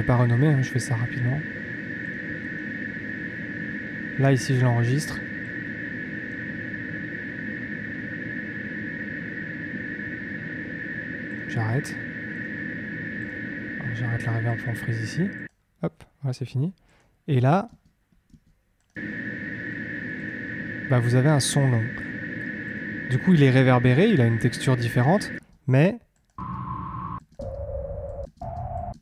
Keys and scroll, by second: 17.2 space, 25.3 space.